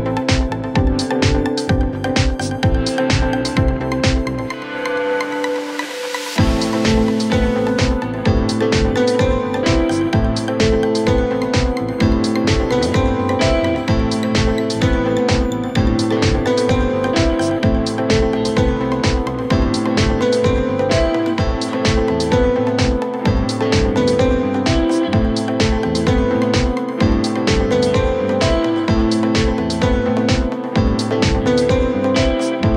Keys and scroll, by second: 5.1 ctrl+z, 9.6 ctrl+z, 10.4 shift+Page_Down, 11.4 ctrl+z, 13.9 Delete, 14.4 ctrl+z, 15.3 shift+Page_Down, 22.7 shift+Page_Up, 28.9 Escape.